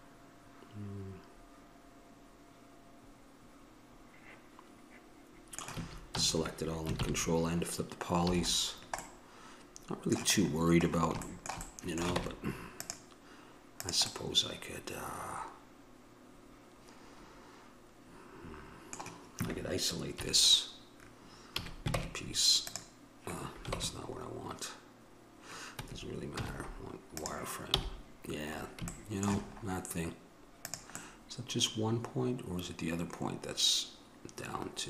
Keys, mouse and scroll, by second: 5.9 a, 6.4 a, 7.2 ctrl+n, 8.5 a, 8.9-10.0 middle drag, 11.0 middle click, 12.4 ctrl+Tab, 14.3-15.9 drag, 16.9 middle click, 20.4 KP_3, 21.7 a, 28.7-30.5 middle drag, 30.8-32.7 drag, 32.7 middle click.